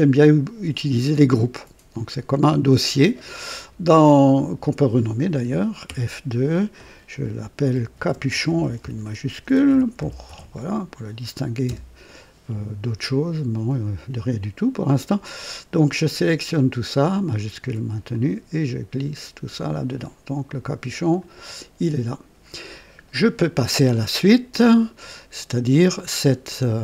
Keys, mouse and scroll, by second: 1.3 click, 4.9 click, 5.9 typing, 7.7-11.6 typing, 11.7 Return, 15.4 click, 17.4 shift+click, 18.1-19.1 shift+drag, 20.5 click, 21.2 click.